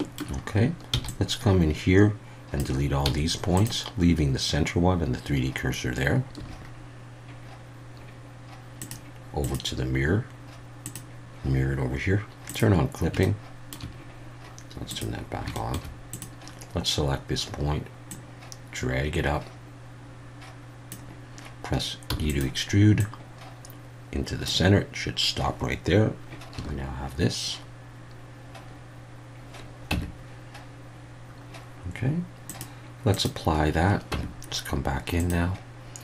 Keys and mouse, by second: 0.9 b, 3.0 x, 6.4 a, 9.5-10.9 drag, 12.5 click, 13.2 shift+middle click, 14.9 click, 15.5 shift+middle click, 16.2-20.9 drag, 22.1 e, 22.3 click, 23.0-24.5 drag, 26.5 a, 29.9 Tab, 32.5-33.2 drag, 34.1 Tab, 35.2 click.